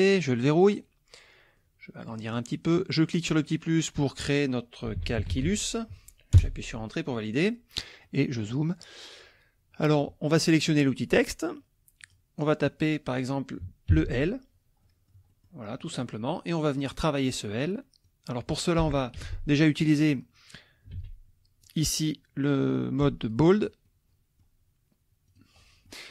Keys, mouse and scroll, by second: 0.5 click, 1.6 click, 3.3 click, 4.6-5.9 typing, 6.3 Return, 8.0 middle click, 8.8-10.2 middle drag, 11.2 click, 12.0 click, 13.9 shift+l, 14.8 click, 15.7 click, 16.9 click, 17.1 middle click, 18.0 click, 19.2 t, 21.0 ctrl+a, 21.7-23.5 drag, 23.8 middle click, 25.3 click, 25.6 middle click.